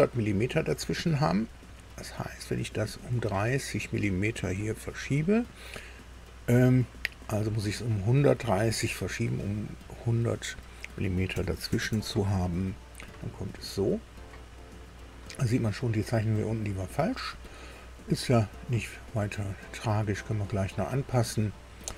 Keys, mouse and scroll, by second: 2.0 scroll up 1, 2.7 scroll up 1, 3.3 scroll up 1, 4.5 scroll up 2, 5.0 scroll up 2, 11.3 KP_1, 11.9 KP_3, 11.9 KP_0.